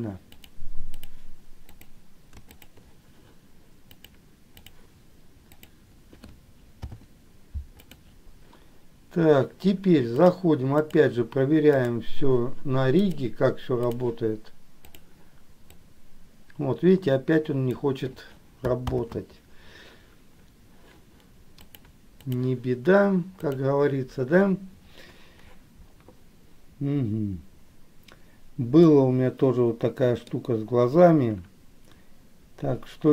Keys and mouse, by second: 0.7 click, 1.8 click, 2.7 shift+click, 4.0 click, 6.8 ctrl+p, 10.4 click, 11.9 click, 13.0-14.2 drag, 15.1 click, 15.8-18.1 drag, 19.0 ctrl+z, 21.8 click, 23.5 click, 29.1-30.4 middle drag.